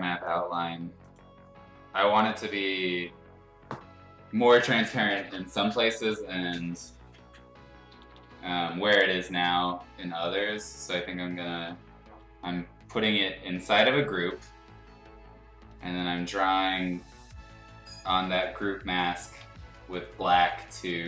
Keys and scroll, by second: 0.0 ctrl+g, 7.9 [, 8.1 [, 8.2 [, 8.3 [, 19.4 x.